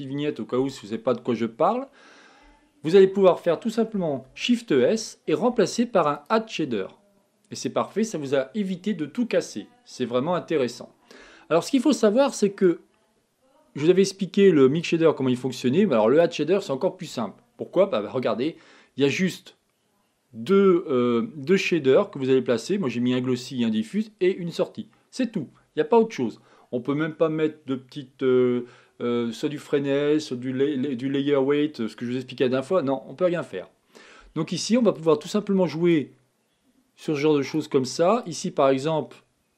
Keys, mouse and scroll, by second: 4.7 click, 13.3 click, 18.6 click, 36.8 click.